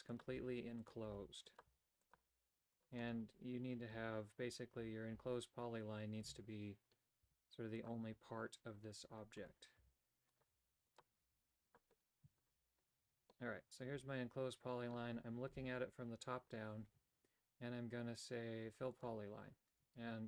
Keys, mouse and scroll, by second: 0.0-2.2 typing, 3.9 a, 4.7 a, 5.1 a, 6.2 l, 7.1 x, 9.3 right click, 9.7 e, 10.4 e, 11.2 e, 12.4 shift+right click, 12.5 f, 13.0 a, 13.2-14.9 middle drag, 15.4 KP_7, 16.8 Tab, 18.9 click, 19.6 Tab.